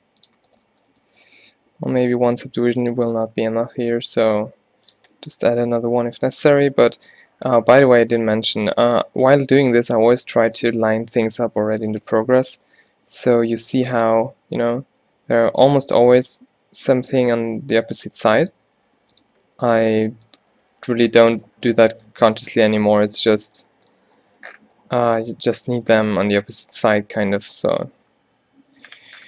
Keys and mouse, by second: 0.8 f, 2.1 g, 4.0 alt+w, 4.5 g, 5.7 g, 8.4 g, 9.1 click, 9.7 g, 10.9 alt+w, 11.4 g, 12.2 middle click, 13.5 g, 18.3 g, 20.9 g, 22.6 g, 29.0 middle click.